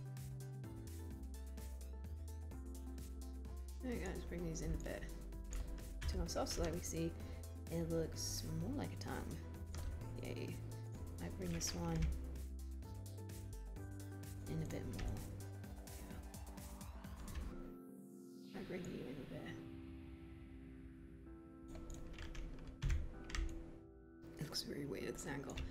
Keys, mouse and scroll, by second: 6.0 3, 12.1 w, 22.9 1.